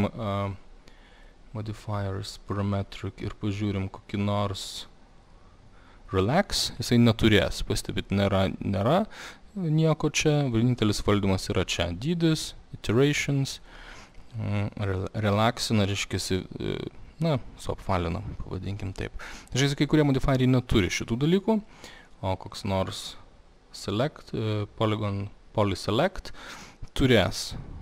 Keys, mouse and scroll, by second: 1.3 click, 6.3 click, 6.8-11.9 drag, 13.2 click, 13.4 click, 13.5 click, 13.6 click, 13.8 click, 13.9 click, 14.1 click, 14.2 click, 14.4 click, 16.0 click, 21.1 click, 22.7 click, 26.2 click.